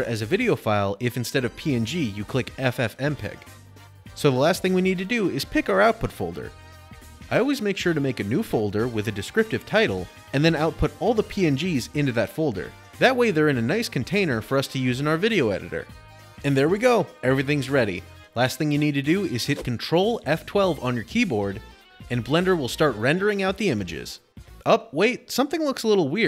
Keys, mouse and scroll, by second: 0.4 click, 5.5 click, 6.7-10.8 typing, 8.7 click, 9.7 shift+click, 11.1 Return, 13.6 click, 13.8 click, 15.9 click, 16.3 typing, 19.8 ctrl+F12, 21.5 scroll.